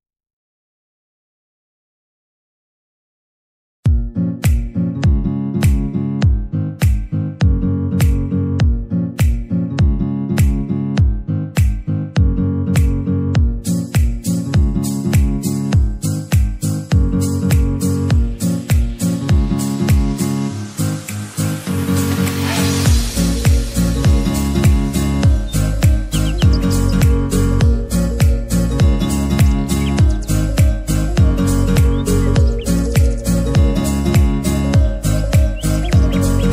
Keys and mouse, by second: 0.7 click, 4.0 click, 4.1 click, 8.8 click, 9.1-22.9 drag, 24.9 ctrl+t, 26.9-33.5 alt+drag, 33.5 ctrl+u, 35.2-36.5 drag.